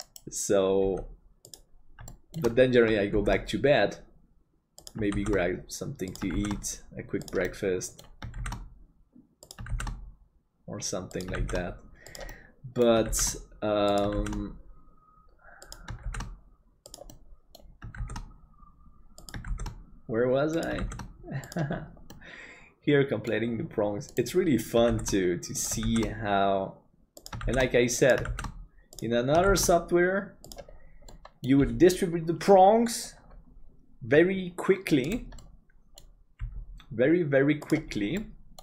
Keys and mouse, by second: 0.1 right click, 0.8 g, 2.1 shift+middle click, 3.2 shift+d, 7.6 middle click, 12.4 middle click, 17.2 middle click, 22.2-23.3 middle drag, 25.0 shift+d, 31.1 middle click, 35.5 middle click, 36.4 g, 38.2 middle click.